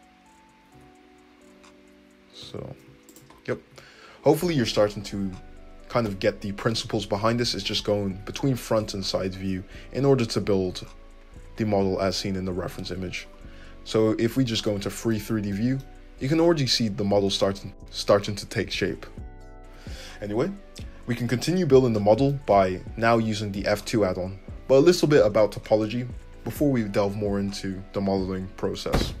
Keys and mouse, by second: 0.7 `, 2.4 g, 3.2 `, 3.7 `, 5.3-23.7 drag, 8.2 `, 8.7 `, 15.2 alt+z, 16.4 alt+z, 19.6 `, 23.7-29.2 middle drag.